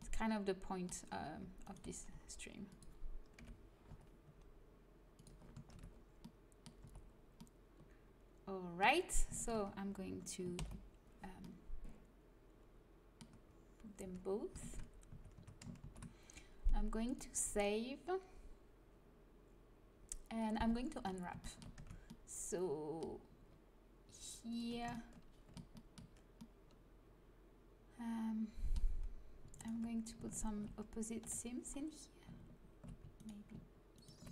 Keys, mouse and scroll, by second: 1.5 click, 2.0 g, 3.3 KP_3, 3.8 z, 4.2 g, 5.5 a, 5.6 Tab, 6.7 z, 9.3-10.5 right drag, 10.5 ctrl+j, 13.9 Tab, 15.0 a, 15.3 Tab, 15.7 ctrl+s, 21.7 Tab, 24.4-26.3 drag, 26.3-28.1 middle drag, 29.5-31.1 right drag, 31.1 KP_7, 33.1-34.3 middle drag.